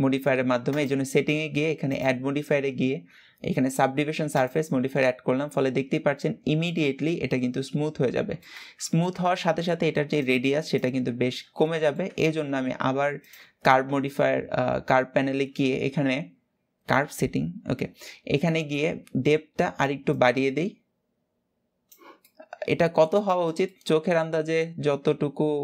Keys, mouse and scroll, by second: 0.4 click, 1.5-4.6 drag, 4.7-7.7 middle drag, 8.5-12.9 shift+middle drag, 12.9 click, 13.7 scroll down 3, 19.7-21.9 drag, 21.9-25.6 middle drag.